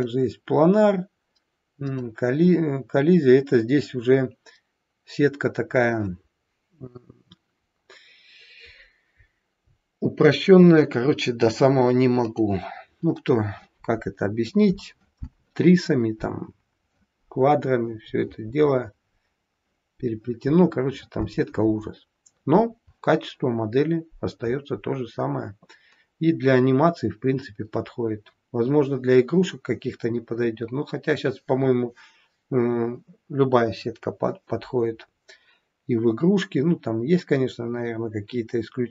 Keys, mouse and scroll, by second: 0.0 click, 1.9 click, 12.1 click.